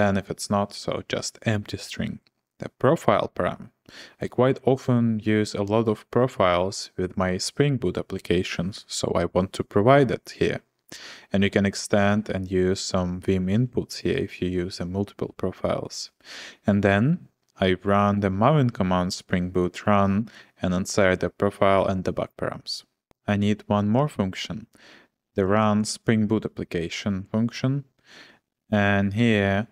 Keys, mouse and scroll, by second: 23.1-24.0 typing, 25.3-26.0 typing, 28.4-29.7 typing.